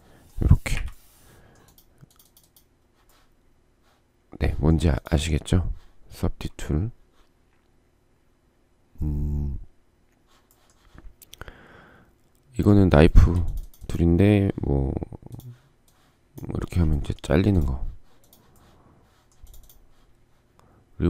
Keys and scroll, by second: 0.3 Delete, 16.8 space.